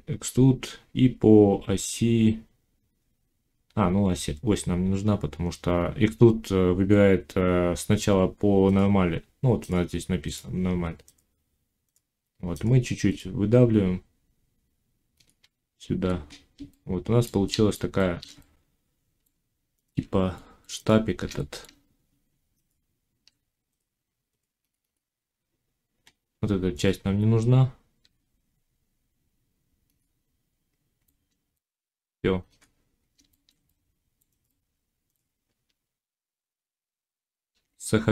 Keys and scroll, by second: 15.4 z, 19.2 Tab, 22.5 Tab, 27.9 x, 35.4 Tab, 37.4 ctrl+s.